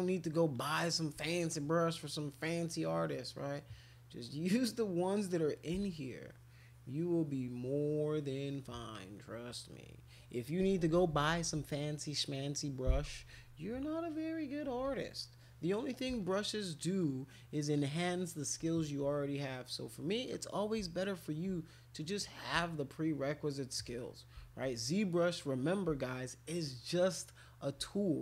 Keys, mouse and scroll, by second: 0.5 shift+click, 1.5-3.2 drag, 5.0 click, 5.8-8.4 shift+drag, 8.9 click, 10.8-11.6 typing, 12.2 click, 14.7 [, 14.9 [, 15.4 click, 15.7 click, 15.8 click, 16.2-17.5 shift+drag, 18.2 shift+click, 19.0-20.1 drag, 21.9 click, 22.0 click, 22.6-23.7 shift+drag, 23.9 click, 24.9-25.9 drag, 26.0-27.4 shift+drag, 27.9 click.